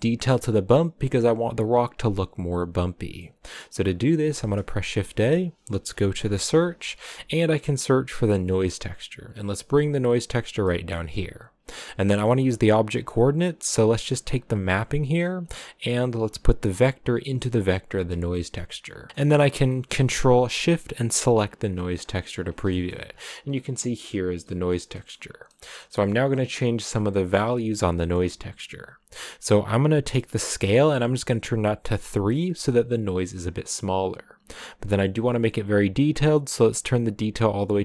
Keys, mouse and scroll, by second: 1.1 scroll up 3, 3.5-4.6 middle drag, 4.6 shift+a, 10.6-13.6 middle drag, 13.6 click, 18.0 click, 19.1-20.1 middle drag, 20.1 scroll up 1, 21.2 ctrl+shift+click, 21.9-22.8 scroll down 7, 22.8-32.1 shift+middle drag, 32.1 click, 36.4-37.8 drag.